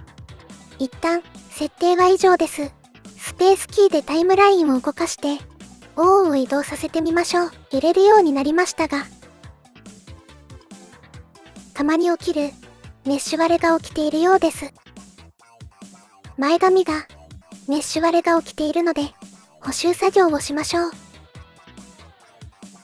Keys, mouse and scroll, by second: 3.1 Return, 3.9 ctrl+z, 3.9 space, 4.9 space, 6.5 g, 13.2 space, 14.1-15.8 drag, 20.4 middle click, 21.8 middle click.